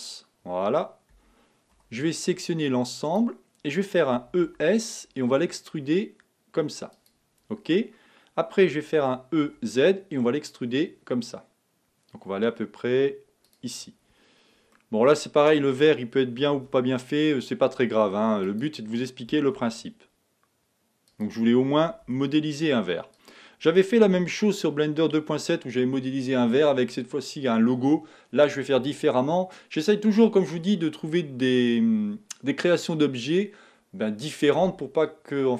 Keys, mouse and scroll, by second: 1.2 a, 2.0 b, 4.2 e, 9.0 e, 14.9-16.4 middle drag, 16.4 e, 19.3 e, 21.8 e, 24.2 f.